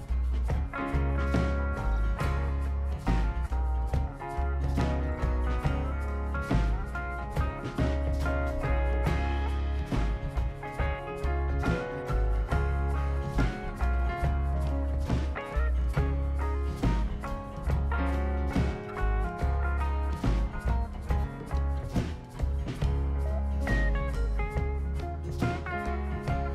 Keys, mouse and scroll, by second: 0.4 right click, 1.5 click, 2.3 ctrl+click, 4.1 click, 5.1 right drag, 6.1-7.4 drag, 8.1-8.6 drag, 8.9 scroll down 1, 9.1-9.7 right drag, 9.9 click, 11.1 click, 13.8 click, 14.5 2, 14.8 5, 15.0 Return, 17.2 click, 19.6 click, 20.3-21.2 typing, 22.4 Return, 24.7-25.3 drag, 26.1-26.5 drag.